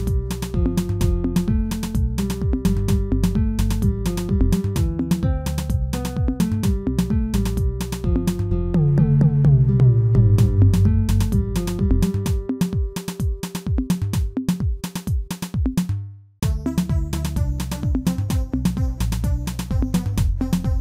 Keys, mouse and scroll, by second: 0.0 ctrl+z, 0.8 g, 2.3 click, 2.7-3.8 shift+middle drag, 3.8 g, 6.2 shift+click, 6.6 shift+middle click, 7.3 click, 7.8 scroll up 1, 8.0 middle click, 8.6 g, 10.1 g, 11.8 click, 12.4 shift+middle click, 13.0 g, 15.2 middle click, 15.7-16.7 scroll up 1, 16.7 g, 18.6 1, 19.1 click, 19.5 middle click, 20.4 click.